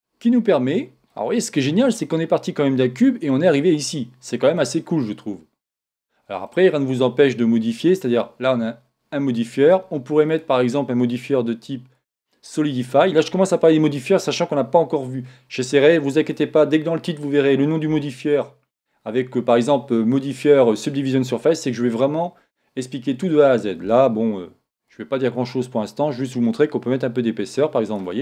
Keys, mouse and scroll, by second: 3.1-4.7 middle drag, 5.6-7.2 middle drag, 10.3 click, 24.8 click.